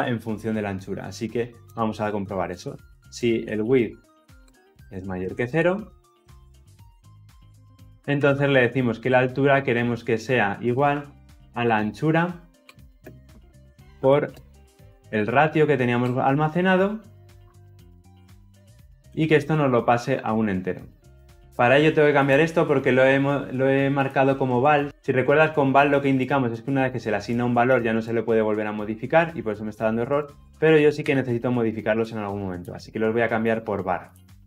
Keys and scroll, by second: 8.8 Return.